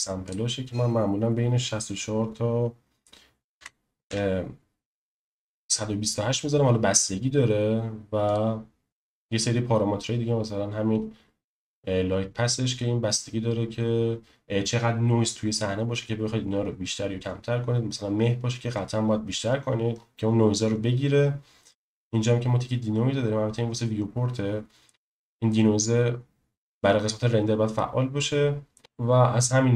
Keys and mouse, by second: 0.2-5.3 drag, 8.2 click, 28.8 space.